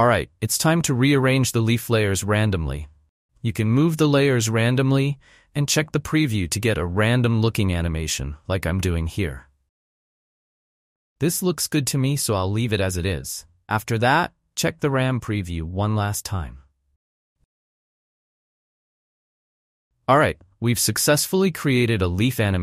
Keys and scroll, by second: 10.9 space.